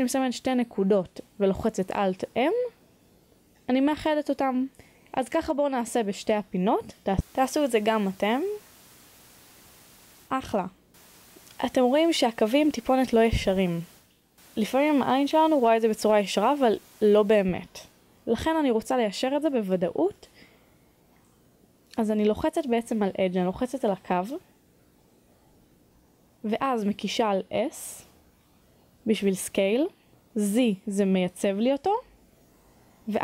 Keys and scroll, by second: 0.2-0.7 typing, 3.8 b, 16.1-17.3 typing, 18.4 Return.